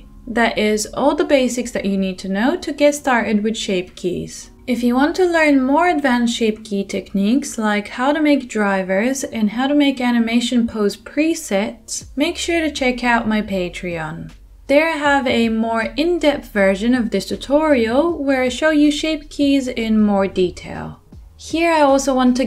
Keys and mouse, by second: 1.2 space, 3.1 space, 4.6 middle click, 4.8 g, 5.0-10.1 drag, 6.6 middle click, 6.6 right click, 6.9 r, 10.1 middle click, 10.4-17.4 drag, 10.4-11.1 right drag, 13.7-17.6 middle drag, 13.7-17.4 right drag, 15.1 g, 17.6-22.3 drag, 18.6-18.9 middle drag, 18.6-18.9 right drag, 18.9 g, 19.9 middle click, 19.9 right click, 20.3 g.